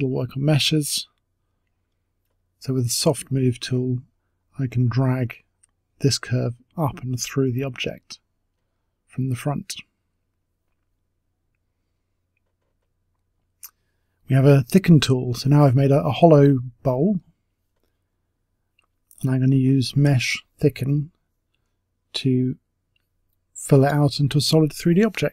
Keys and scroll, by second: 13.9 ctrl+z, 13.9 Delete.